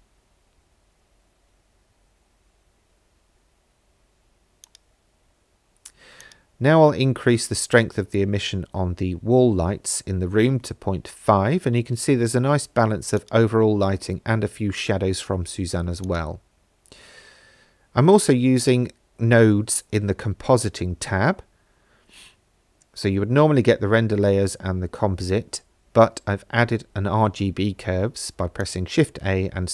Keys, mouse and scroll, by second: 4.6 click, 6.2-7.6 drag, 13.2 click, 16.1 click, 25.8 shift+a.